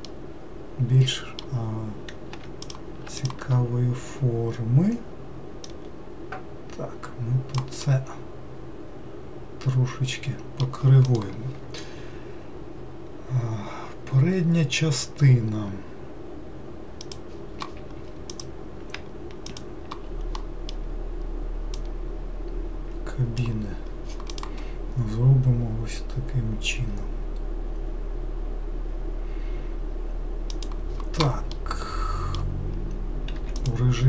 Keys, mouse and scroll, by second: 2.4 typing, 2.6 click, 3.2 shift+click, 5.6 click, 7.8-10.9 middle drag, 18.3 click, 19.5 shift+click, 20.4-21.7 middle drag, 21.7 click, 31.5-33.4 middle drag, 33.4 2, 33.6 click.